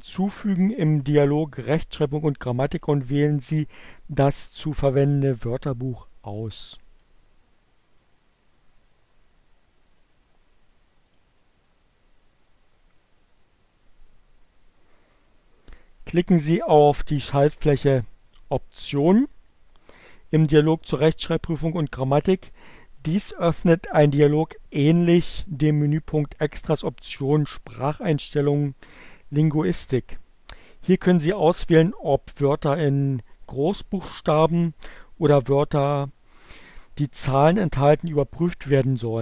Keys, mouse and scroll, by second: 6.4 click, 9.8 click, 19.1 click.